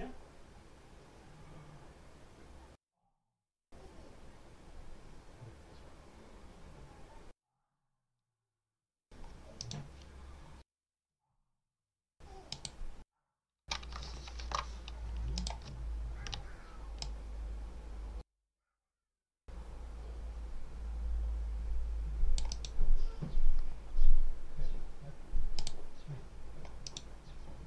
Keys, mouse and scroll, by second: 9.4 right click, 12.4 click, 14.2 alt+5, 15.2 click, 15.7-16.1 ctrl+scroll up 2, 16.9-22.7 drag, 22.4 right click, 25.4 click, 26.7 right click.